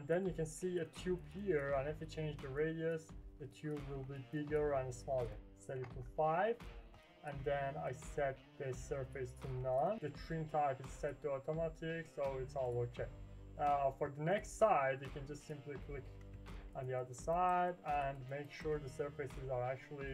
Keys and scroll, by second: 5.7 5, 5.8 Return.